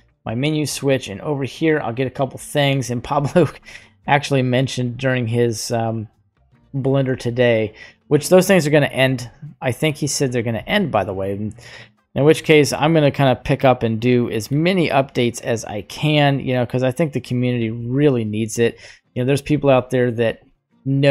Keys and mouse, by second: 0.7-4.3 drag, 4.5 right click, 5.5 middle click, 6.5 middle click, 10.1 click, 10.5-12.4 drag, 13.2-14.6 drag, 14.9-17.6 drag, 18.5 middle click.